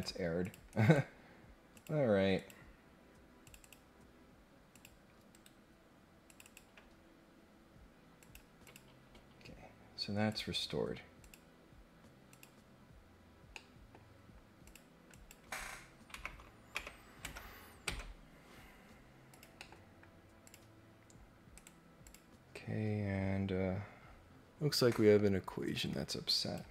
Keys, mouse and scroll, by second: 0.4 click, 0.7 right click, 1.7 click, 2.3 click, 3.4 click, 3.6 click, 4.7 click, 5.2 Escape, 6.2 click, 8.2 click, 8.6 click, 10.2 click, 11.2 click, 12.2 click, 13.5 middle click, 13.5-13.9 scroll up 2, 14.6 click, 15.1 click, 19.3 click, 19.5 middle click, 20.4 click, 21.5 right click, 22.0 click, 25.6 click.